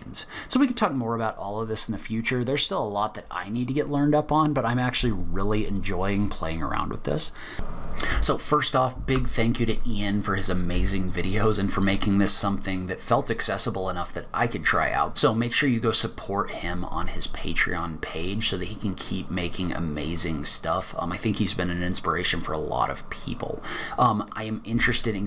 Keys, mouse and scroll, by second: 0.5 click.